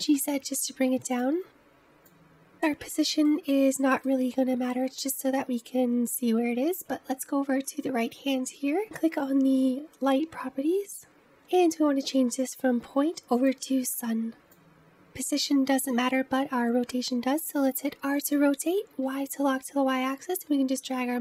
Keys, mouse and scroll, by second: 1.4-1.7 scroll up 4, 1.7 middle click, 2.0-3.2 scroll down 2, 3.2-13.3 middle drag, 13.3-14.5 drag, 17.8 r.